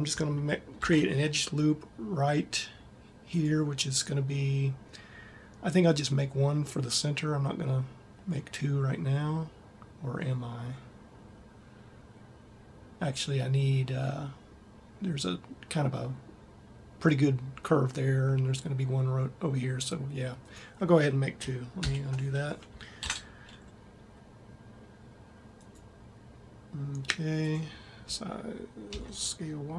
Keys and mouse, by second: 0.6 ctrl+r, 4.0 click, 22.0 ctrl+z, 23.0 ctrl+r, 28.0 s.